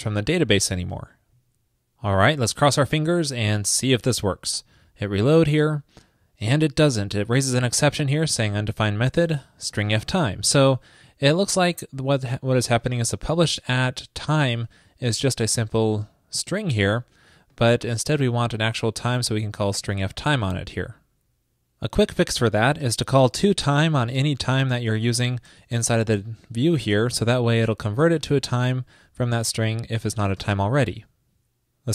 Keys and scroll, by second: 30.4 super+s.